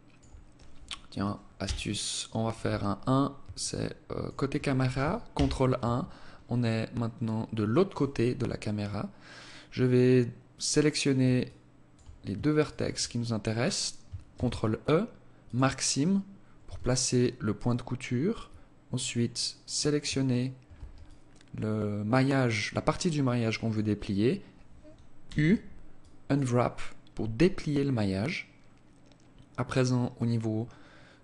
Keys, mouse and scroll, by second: 0.7 KP_1, 2.7 alt+shift+click, 4.4 ctrl+KP_1, 5.6-5.9 scroll down 8, 5.9-6.4 scroll up 8, 7.5 scroll up 1, 9.8 right click, 10.6 alt+click, 11.8 shift+right click, 13.4 ctrl+e, 15.8 a, 18.0 alt+right click, 19.4 alt+shift+right click, 20.2 alt+click, 24.4 u, 29.3 click.